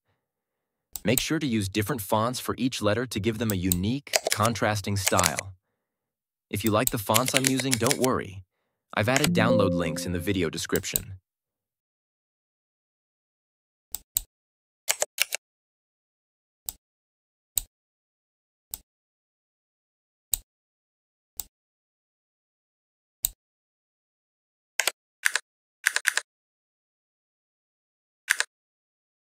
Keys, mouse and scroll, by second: 0.8 click, 3.4 click, 4.2 shift+s, 5.1 a, 6.5 click, 6.9-8.3 typing, 9.1 Return, 10.6 click, 10.7 click, 13.8 click, 15.1 ctrl+t, 16.6-17.5 drag, 24.7 Return, 25.1 Up, 28.2 Up.